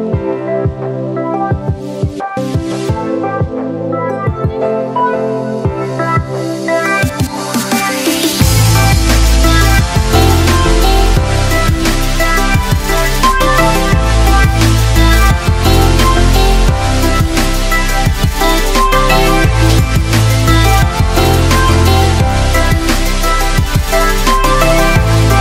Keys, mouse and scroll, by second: 6.8-7.1 click, 8.8 ctrl+w, 10.7 ctrl+w, 12.4 click, 16.0 Delete, 17.5 click, 18.1-18.7 scroll down 1, 19.2-25.4 drag, 20.7-22.2 drag.